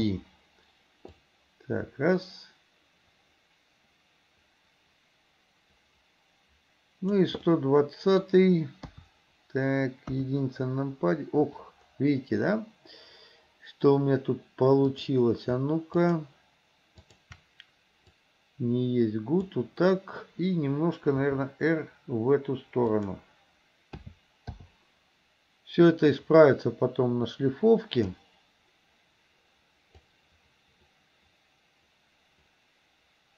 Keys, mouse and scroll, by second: 0.0 i, 1.3-7.3 drag, 7.5-8.3 middle drag, 8.9 KP_3, 10.1 KP_1, 15.0 click, 16.1 shift+click, 17.0 shift+click, 18.1-19.6 drag, 21.3 r, 24.1 a, 24.6 i, 26.0-28.2 drag, 30.1-33.3 drag.